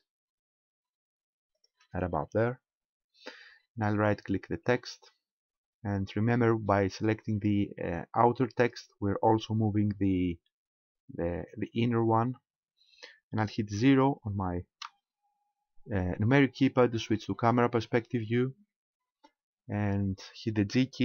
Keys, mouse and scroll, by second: 1.7 ctrl+click, 4.7 right click, 6.1-6.5 scroll up 4, 7.0-8.6 scroll up 1, 8.6 scroll up 1, 14.9 KP_0, 18.4-19.5 scroll up 3, 19.6 scroll down 1.